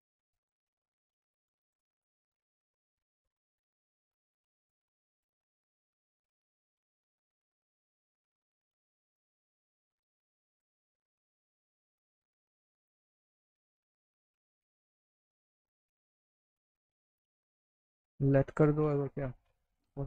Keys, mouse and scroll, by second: 0.5 click, 1.7 click, 3.0 click, 3.9 click, 6.6 shift+click, 6.9 right click, 8.0 click, 10.1 click, 11.3 click, 12.3 right click, 13.7 click, 14.2 click, 15.7 click, 17.7 click, 19.9 click.